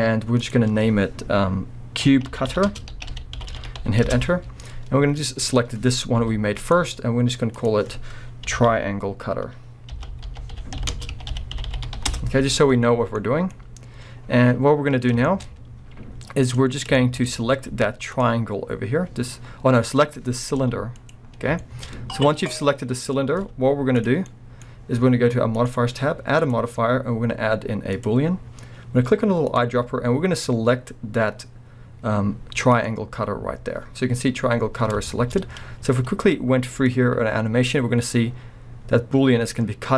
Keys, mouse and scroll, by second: 0.4-5.6 drag, 3.5 t, 4.2 Return, 6.2 g, 6.7 right click, 7.6-13.2 drag, 12.2 Return, 13.0 scroll down 1, 13.2-16.5 middle drag, 13.5-13.9 scroll up 1, 14.2 scroll down 1, 15.5 scroll up 1, 16.5 click, 16.9-21.1 shift+middle drag, 17.3-17.7 scroll up 2, 17.7 z, 20.6 g, 21.1 right click, 21.3 scroll down 2, 21.6-25.6 shift+middle drag, 23.1 scroll down 2, 23.3 z, 24.2-24.7 scroll down 2, 24.7-25.6 scroll up 2, 25.6 click, 26.4-29.6 drag, 35.1-36.9 shift+middle drag, 35.5-36.2 scroll up 2, 36.2-36.9 scroll up 1, 36.9-37.8 drag.